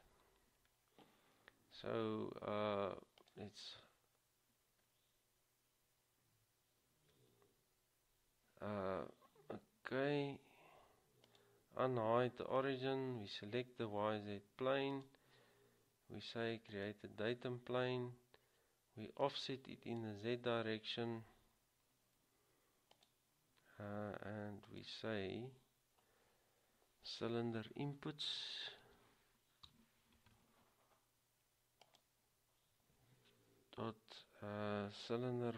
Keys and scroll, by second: 29.0-29.8 typing.